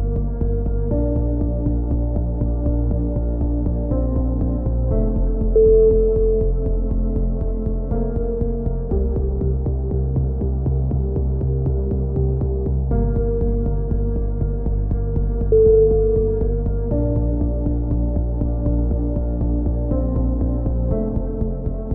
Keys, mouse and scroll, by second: 1.2 a, 1.3-2.4 drag, 2.5 KP_3, 3.1 z, 4.9 z, 5.5-6.6 right drag, 6.3 z, 7.1-8.2 drag, 12.1-13.5 drag, 13.3 a, 13.7 z, 13.9 middle click, 14.2 Tab, 14.6 click, 15.8 KP_1, 16.3 z, 16.6 z, 17.3 click, 18.9 Tab, 21.2-21.9 drag.